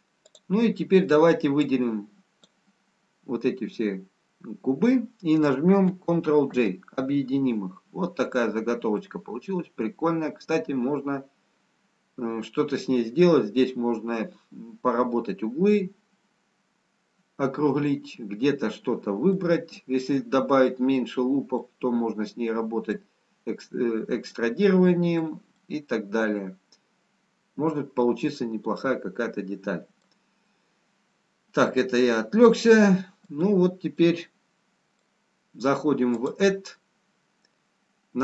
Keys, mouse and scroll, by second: 0.2 click, 1.6 click, 7.0 ctrl+j, 8.5 scroll up 1, 10.0 middle click, 10.0 scroll up 1, 20.5 middle click, 22.0 middle click, 25.4 middle click, 31.7 middle click, 35.9 middle click, 37.1 click.